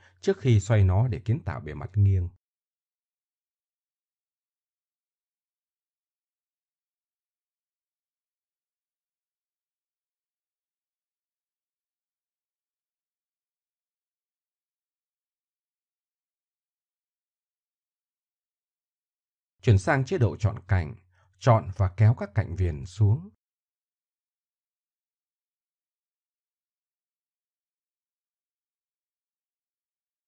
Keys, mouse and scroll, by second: 2.3-3.7 drag, 4.8 KP_1, 6.1 KP_1, 7.8 ctrl+KP_1, 9.0 middle click, 11.8 r, 14.6 r, 15.8 r, 16.9 Tab, 18.2 Tab, 19.6 Tab, 20.2 a, 21.7-22.9 middle drag, 24.3 click, 25.6-26.7 middle drag, 27.4 middle click, 27.7 middle click, 29.3 middle click.